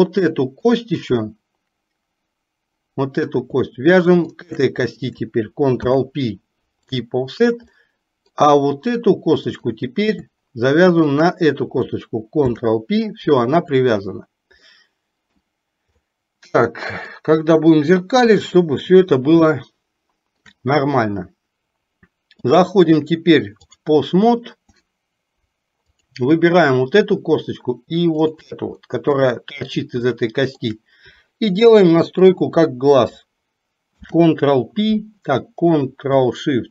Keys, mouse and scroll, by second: 0.9 click, 4.5 shift+click, 7.9 middle click, 9.6 click, 11.1 shift+click, 14.7 middle click, 16.1-17.2 middle drag, 18.4 KP_3, 19.6-20.6 shift+middle drag, 22.5-23.9 drag, 28.9 middle click, 30.2-30.7 shift+middle drag.